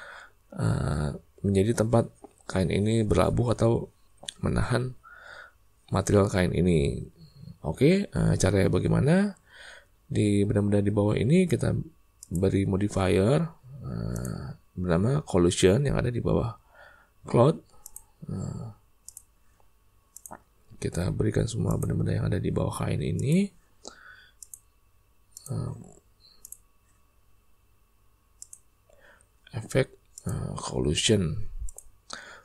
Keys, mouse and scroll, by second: 12.1 click, 14.2-17.9 drag, 20.2-21.8 drag, 23.1 click, 24.4-25.4 drag, 26.4 click, 28.4-30.3 drag, 31.6 click.